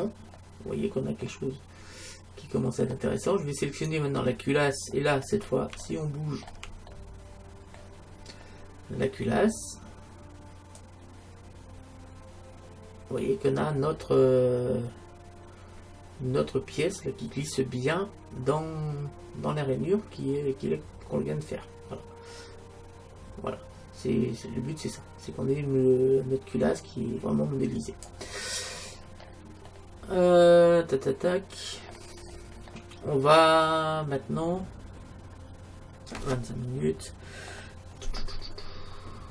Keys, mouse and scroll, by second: 1.3-3.1 middle drag, 3.7-5.5 right drag, 5.5-8.8 middle drag, 10.8-12.6 drag, 28.5 middle click, 29.1-29.4 scroll down 1, 29.4-31.7 middle drag, 32.3-32.7 scroll up 1, 32.7-34.7 middle drag, 34.7 middle click, 39.1-39.3 middle drag.